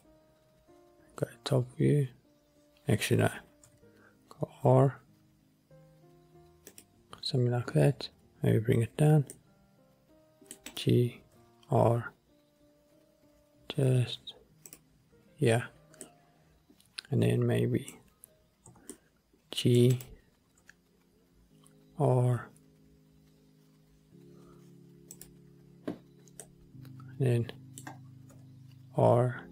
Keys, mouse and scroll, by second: 0.0-1.3 drag, 3.8 r, 6.8-9.1 drag, 9.2 g, 9.4 middle click, 10.6 scroll up 1, 10.8 click, 11.4 r, 14.8 click, 16.1-18.8 middle drag, 18.8 g, 19.1 middle drag, 20.1 click, 20.7 r, 25.4 click, 26.6-28.4 middle drag, 28.4 r.